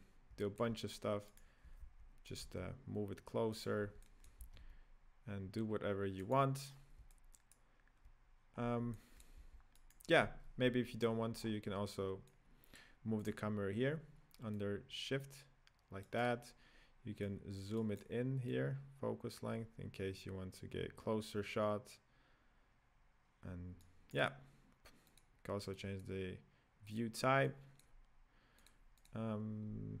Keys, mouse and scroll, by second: 0.4 middle click, 1.4 right click, 1.6 g, 2.4 g, 3.7-4.0 scroll down 5, 4.0-4.4 middle drag, 4.4 g, 6.7-7.0 scroll up 1, 7.0-8.5 middle drag, 8.5-8.9 scroll down 2, 8.9 middle click, 9.4 g, 11.2-12.2 scroll down 2, 12.2-13.2 drag, 14.5-16.1 drag, 17.1 click, 18.4-21.4 drag, 25.0-29.6 drag, 29.6-30.0 scroll down 1.